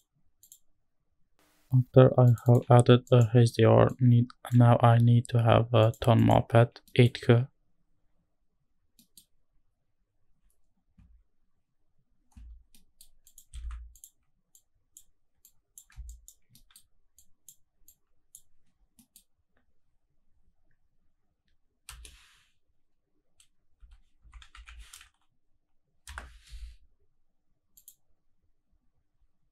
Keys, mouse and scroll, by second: 0.4 click, 3.1 alt+right click, 3.9 click, 5.4-5.9 scroll up 1, 7.6 click, 7.6 middle click, 7.6-8.6 scroll up 2, 8.6-9.3 scroll down 1, 9.3 middle click, 9.3-12.8 scroll down 1, 12.8 middle click, 13.3 click, 13.7 shift+d, 14.0 click, 14.5-15.0 drag, 15.5 click, 16.2 ctrl+shift+right click, 16.5 middle click, 17.2 click, 17.9-18.4 drag, 19.6-21.1 scroll down 1, 21.1 middle click, 21.1 scroll down 1, 23.3-26.5 scroll up 2, 26.5 space.